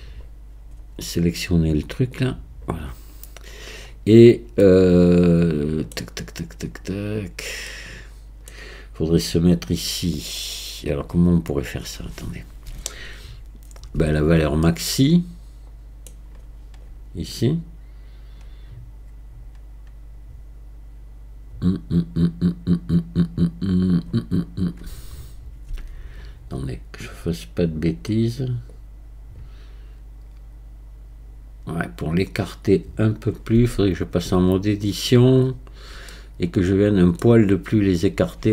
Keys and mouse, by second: 2.2 click, 4.6-6.0 middle drag, 7.7 middle click, 14.0 Tab, 14.8-16.1 middle drag, 25.8 Tab, 28.8-33.4 drag, 33.6 Tab, 36.2 click, 36.9 middle click.